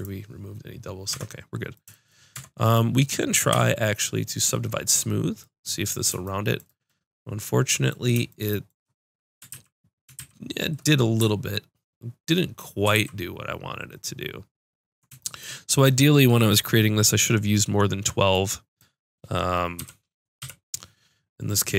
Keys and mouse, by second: 1.1 Tab, 2.3 Tab, 3.5 w, 9.5 ctrl+z, 10.2 ctrl+shift+z, 12.9 ctrl+z, 19.8 KP_3, 20.4 KP_5.